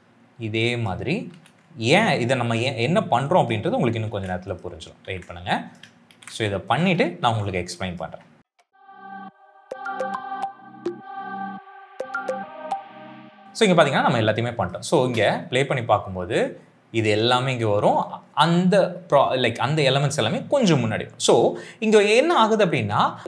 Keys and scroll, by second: 1.2 ctrl+c, 2.4 ctrl+v, 3.9 ctrl+c, 5.0 ctrl+v, 6.0 ctrl+c, 7.1 ctrl+v, 8.4 ctrl+c, 8.6 ctrl+v, 9.1 ctrl+c, 9.4 ctrl+v, 9.8 ctrl+c, 10.2 ctrl+v, 10.7 ctrl+c, 11.0 ctrl+v, 11.9 ctrl+c, 12.2 ctrl+v, 14.9 space, 17.8 space.